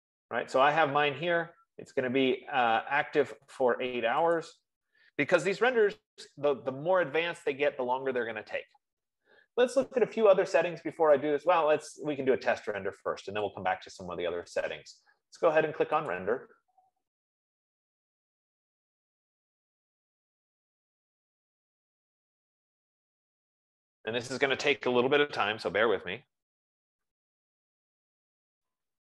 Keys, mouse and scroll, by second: 0.4-1.5 right drag, 2.1 right click, 4.9 click, 11.8 click, 13.9 click, 19.9 F15.